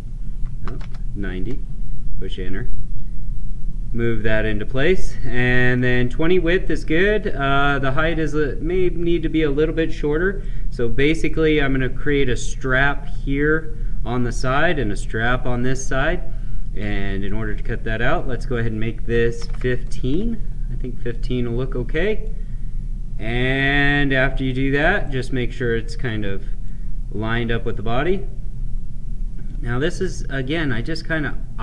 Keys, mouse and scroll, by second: 2.9-4.6 drag, 4.6-8.0 right drag, 8.0 click, 10.4-13.7 right drag, 16.8 right click, 18.0 click, 21.1-25.0 drag, 25.0-26.6 right drag, 26.6-29.8 drag, 29.8-31.6 right drag.